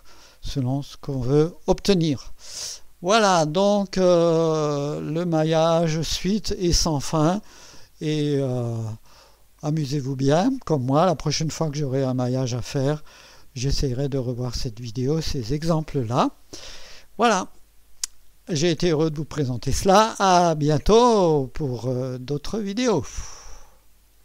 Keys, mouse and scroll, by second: 2.2 click, 7.6 scroll down 1, 8.1 scroll up 1, 8.9-10.2 right drag, 11.6 right click, 12.3 right click.